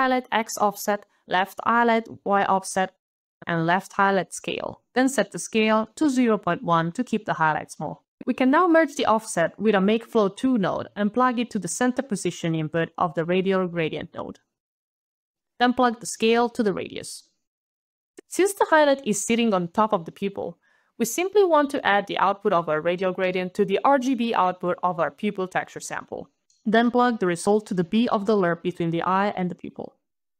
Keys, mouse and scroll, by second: 0.1 alt+BackSpace, 0.4 alt+shift+y, 0.8 alt+Return, 1.3-2.1 alt+scroll up 1, 2.1 alt+click, 3.0 alt+right click, 3.2 alt+scroll, 3.3 alt+click, 3.3 ctrl+alt+v, 3.4 alt+right click, 3.7-4.1 alt+BackSpace, 4.1 alt+shift+s, 4.2 alt+c, 4.3 alt+a, 4.3 alt+l, 4.3 alt+e, 4.4 alt+Return, 4.5 alt+click, 5.6 alt+KP_1, 6.6 alt+KP_Enter, 8.5 alt+KP_Decimal, 8.7 alt+click, 9.4 alt+m, 9.5 alt+a, 9.6 alt+k, 9.7 alt+e, 9.8 alt+space, 9.9 alt+f, 10.0 alt+l, 10.1 alt+o, 11.0 alt+Up, 11.2 alt+Return, 12.3 alt+click, 13.4 alt+click, 14.5 alt+click, 16.1 alt+click, 17.5 alt+click, 17.9 alt+click, 17.9 alt+scroll, 18.0 alt+click, 18.4 alt+click, 18.9 alt+scroll, 19.1 alt+middle click, 21.8 alt+click, 22.5 alt+scroll down 1, 22.6 alt+a, 22.8 alt+d, 22.9 alt+d, 23.6 alt+click, 24.4 alt+click, 27.8 alt+right click.